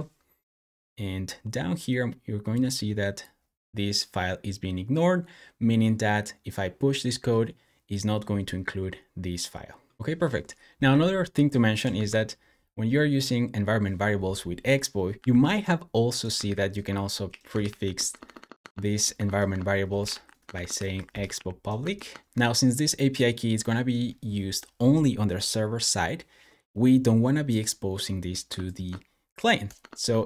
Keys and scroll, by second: 15.1 Escape, 15.2 typing, 16.3-21.7 typing, 18.4 Tab, 29.6 super+BackSpace.